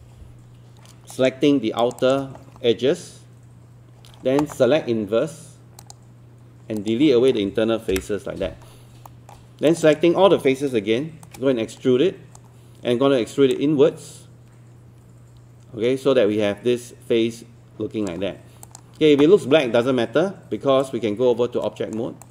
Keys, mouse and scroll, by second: 1.1 click, 1.8 shift+click, 5.8 click, 7.9 Delete, 9.1 alt+middle click, 9.7 click, 11.2-13.3 shift+right drag, 13.6-18.3 drag, 20.8 right click, 22.2 click.